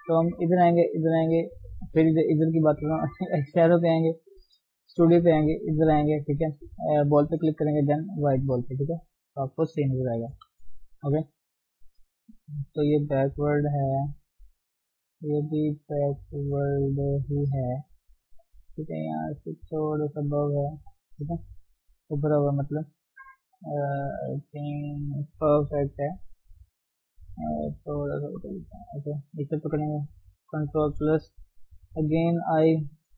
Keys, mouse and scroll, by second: 8.9 scroll up 2, 9.2 scroll down 1, 9.3 shift+middle click, 10.0 g, 10.3 f, 10.7 scroll up 3, 11.0 shift+middle click, 11.3-11.9 scroll up 1, 11.9-17.7 drag, 17.7 scroll down 4, 17.9 shift+middle click, 18.1-18.6 scroll up 5, 18.6-21.3 drag, 21.3 shift+middle click, 22.0-23.7 drag, 23.7-24.4 scroll down 7, 24.4 middle click, 25.3 scroll up 1, 25.7 KP_3, 25.9-26.3 scroll up 5, 26.3-26.8 scroll down 1, 26.9-28.2 drag, 28.2 Tab, 28.5 middle click, 28.8 scroll up 1, 29.2 click, 30.7 ctrl+KP_Add, 31.7 i, 32.7-33.1 middle drag.